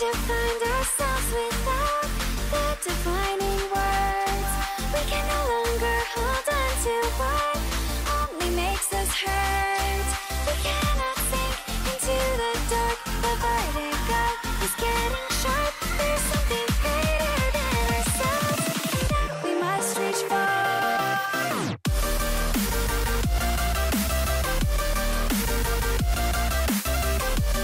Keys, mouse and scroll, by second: 0.0-0.8 typing, 2.7 t, 3.1 e, 3.4 x, 4.2 t, 4.5 Tab, 7.3 click, 13.5-16.1 drag, 17.6-19.2 drag, 24.3-25.5 drag.